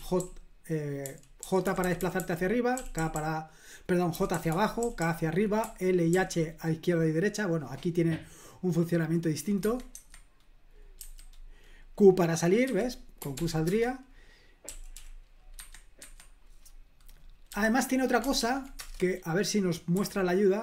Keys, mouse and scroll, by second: 0.0-6.1 typing, 9.6 Escape, 9.9 Escape, 11.0 q, 12.6 q, 13.4 ctrl+p, 13.7 Return, 14.7 typing, 15.6 Escape, 16.0 Escape, 17.5 q, 18.4 ctrl+p, 18.8 Return, 19.9 h.